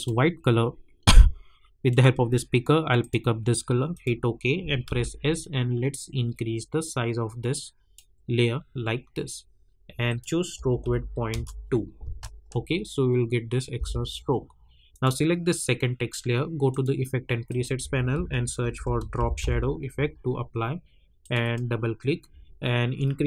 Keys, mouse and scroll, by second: 4.8 s, 5.4-11.3 drag, 11.3 Return, 12.0 space, 14.9 click, 18.1 ctrl+a, 18.5-19.9 typing, 21.2 click.